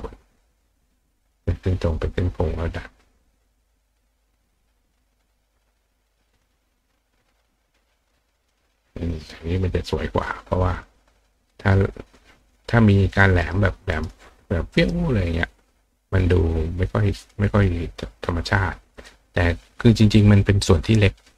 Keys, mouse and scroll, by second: 0.8 click, 1.2 click, 2.2-3.8 drag, 5.9 click, 7.4-8.1 drag, 8.5 click, 10.7 click, 11.5 click, 12.4 click, 13.1 click, 13.4 right click, 13.9 right click, 14.8 right click, 16.3 click, 17.2 click, 18.9 click.